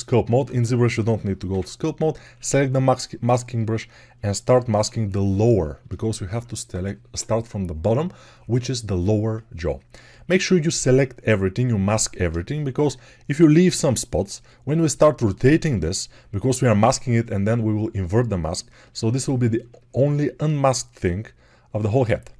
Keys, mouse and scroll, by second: 1.3 m, 3.0-22.3 drag.